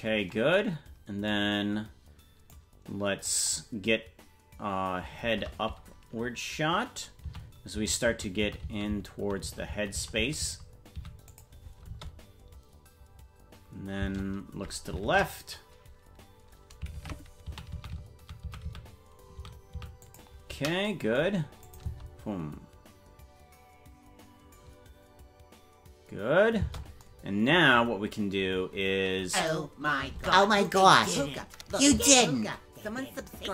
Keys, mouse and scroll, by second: 0.5 space, 2.5 click, 5.2 shift+`, 11.8 space, 15.0 shift+`, 19.0 shift+`, 21.6 click, 21.8 space, 26.6 space, 29.5 right click, 30.2 ctrl+Tab, 30.8 right click.